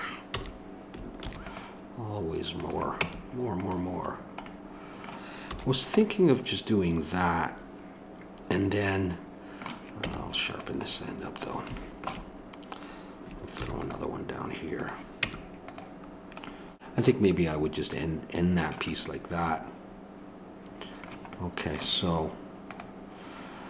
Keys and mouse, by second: 0.3 a, 1.2 ctrl+r, 3.0 Tab, 5.5 a, 10.0 Tab, 13.6 ctrl+r, 15.2 Tab.